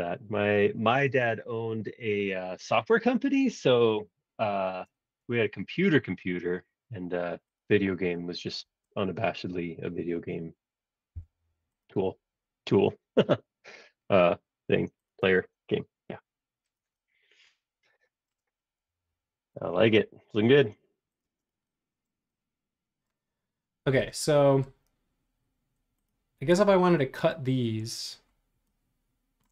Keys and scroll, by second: 11.1 m, 15.2 space, 18.8 m, 21.2 space, 22.2 space.